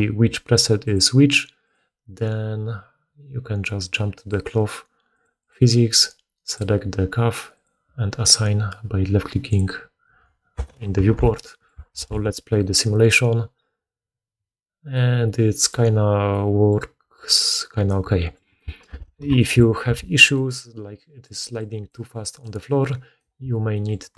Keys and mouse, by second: 6.5-7.5 middle drag, 7.5-18.8 drag, 11.0 alt+a, 11.9 shift+space, 18.8 shift+space, 19.2-22.6 drag, 19.8 alt+a, 21.3-24.1 typing, 22.6 right click.